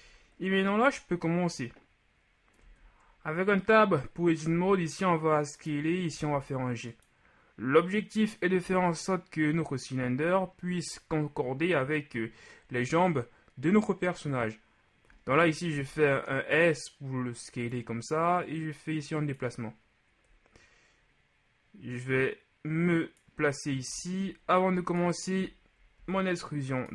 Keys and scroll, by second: 2.7 Tab, 4.5 s, 6.1 g, 8.7 z, 15.7 shift+s, 26.0 alt+shift+e.